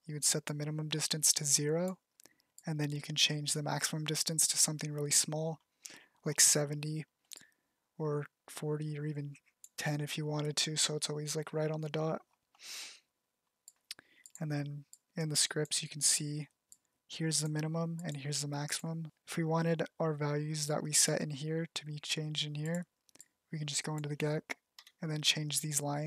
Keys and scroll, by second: 25.0 0.